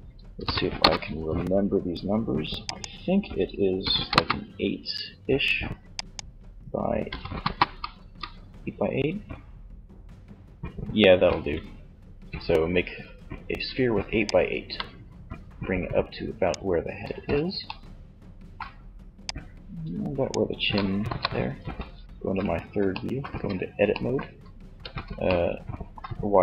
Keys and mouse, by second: 1.8-3.6 drag, 5.2-6.9 drag, 13.5-15.2 drag, 16.2 z, 16.9 middle click, 18.4-20.1 drag, 20.1 KP_3, 20.9 z, 22.4 Tab, 24.0 z, 25.8 a.